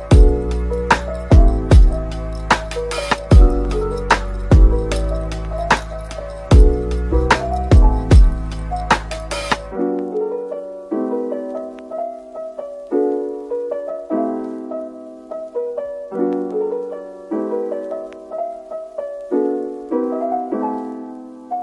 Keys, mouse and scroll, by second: 0.1 double click, 7.2 Tab, 11.0 typing, 13.0 double click, 13.3-13.7 scroll down 1, 13.7 Tab, 14.2 Tab, 14.4 middle click, 16.2 shift+click, 16.5 shift+double click, 17.5-18.1 typing, 19.3 double click, 20.8 typing.